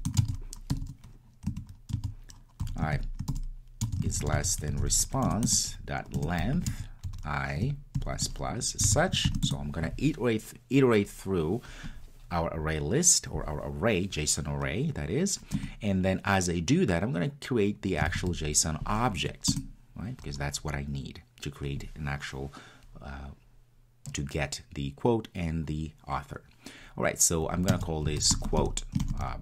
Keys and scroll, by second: 5.3 Return, 7.1 Return, 19.6 Return.